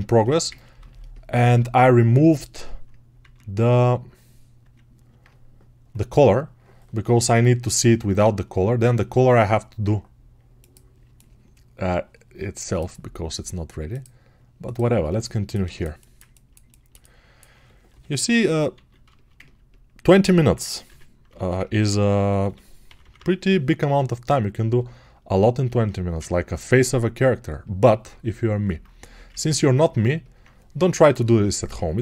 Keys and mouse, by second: 5.0-10.9 alt+right drag, 10.9-15.0 alt+middle drag.